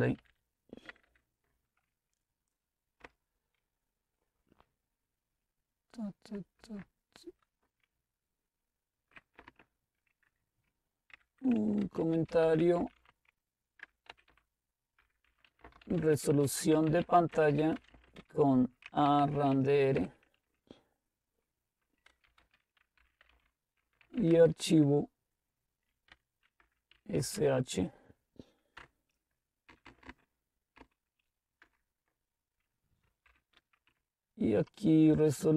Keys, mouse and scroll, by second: 0.0-1.1 typing, 3.1 Return, 6.6 Right, 7.9-9.3 Right, 9.5 Up, 11.2-20.4 typing, 21.9-24.6 typing, 26.0-27.4 typing, 28.8 Return, 29.7 Down, 29.9 Down, 30.1 Down, 30.7-31.7 typing, 33.3-35.5 typing.